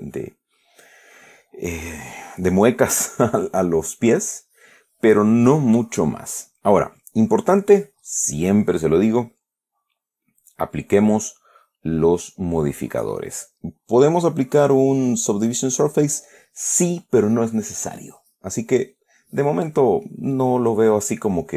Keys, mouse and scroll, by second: 19.9-21.5 drag.